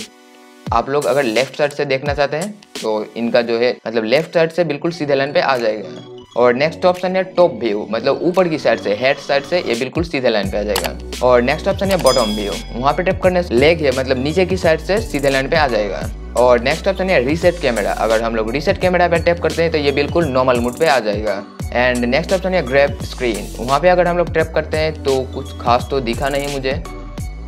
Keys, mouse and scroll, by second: 18.3-27.4 drag.